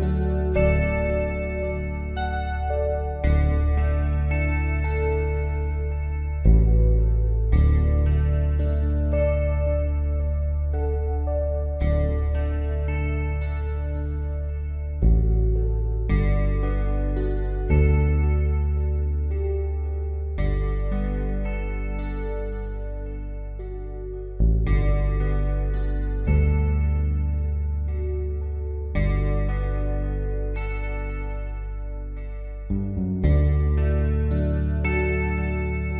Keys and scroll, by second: 0.9 space, 3.5-4.4 typing, 7.5 ctrl+z, 9.0 space, 10.2 space, 12.6 space, 14.8 space, 18.8 space, 20.1 space, 22.1 space, 27.0 space, 28.6 space, 29.9-31.0 typing, 33.1-33.8 typing.